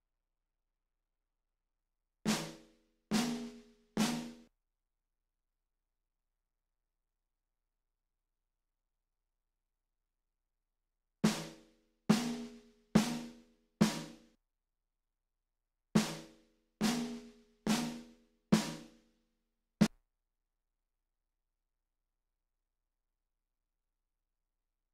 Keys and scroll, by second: 1.9 space, 4.5 space, 10.9 space, 14.4 space, 15.6 space, 19.9 space.